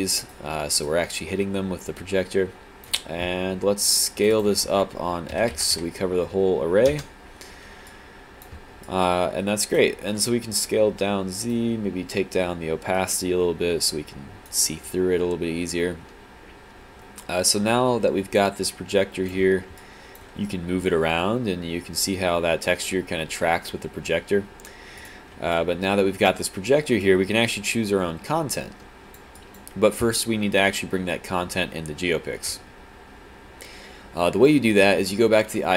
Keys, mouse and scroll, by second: 0.9 alt+click, 6.9 Return, 7.9 alt+click, 8.9 alt+click, 14.9 alt+click, 19.8 click, 25.1 right click, 25.6 click, 27.0 click, 29.4 click.